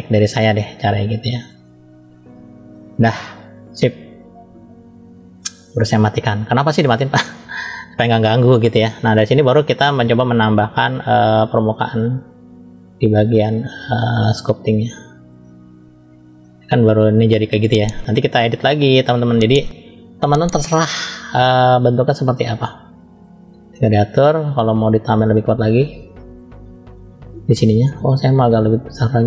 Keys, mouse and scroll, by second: 1.1 click, 2.7 click, 4.9-6.8 drag, 7.5-8.6 middle drag, 10.8 click, 14.4-15.1 drag, 15.6 scroll down 1, 16.1-16.8 middle drag, 18.0 scroll up 1, 18.6-19.2 middle drag, 20.6-21.7 drag, 24.1 click, 25.6 click, 27.5 middle click, 28.3 click, 28.9 middle click.